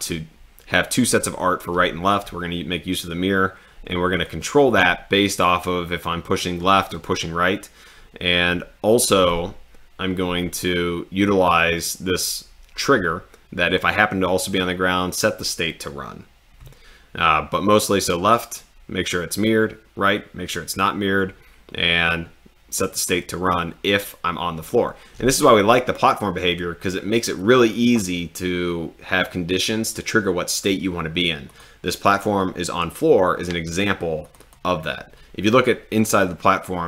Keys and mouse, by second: 31.5 click, 34.2 click.